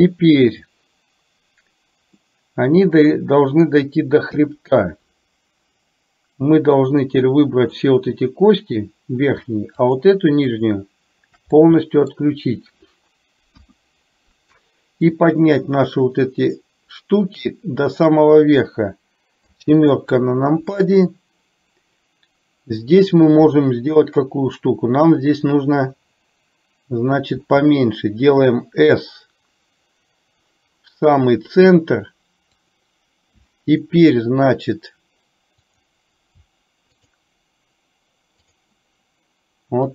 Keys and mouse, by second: 2.3-3.7 middle drag, 4.4 KP_1, 6.9 click, 9.9 shift+click, 10.7 shift+click, 11.5 middle click, 13.5 KP_1, 15.3-18.0 drag, 19.4 KP_7, 35.8 click, 37.0 shift+click, 38.4 shift+click.